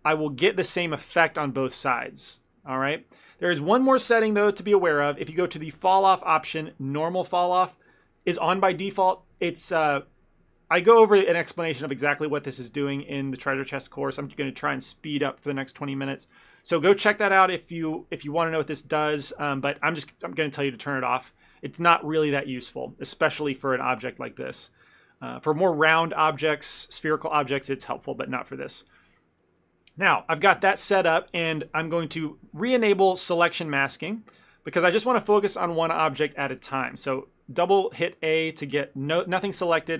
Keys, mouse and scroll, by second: 0.2 click, 0.9 middle click, 1.4 ctrl+middle click, 2.0 middle click, 2.3 middle click, 2.4 ctrl+middle click, 2.5 middle click, 2.7 ctrl+middle click, 2.8 ctrl+middle click, 5.9 click, 23.1 ctrl+z, 23.7 ctrl+z, 24.4 middle click, 24.7 middle click, 24.9 middle click, 25.3 middle click, 28.2 ctrl+middle click, 28.5 middle click, 28.7 shift+middle click, 30.6 KP_3, 31.7 KP_1, 33.2 click, 33.9 ctrl+middle click, 34.3 shift+middle click, 34.5 ctrl+middle click, 36.8 a, 37.0 a.